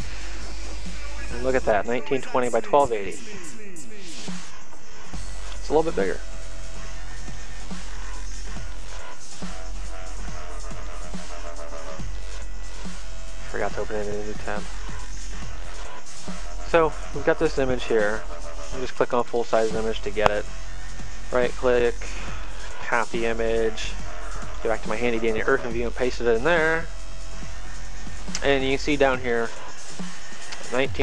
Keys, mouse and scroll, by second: 7.0 click, 11.7 middle click, 12.7 click, 19.2 click, 21.7 right click, 23.5 click, 27.0 click.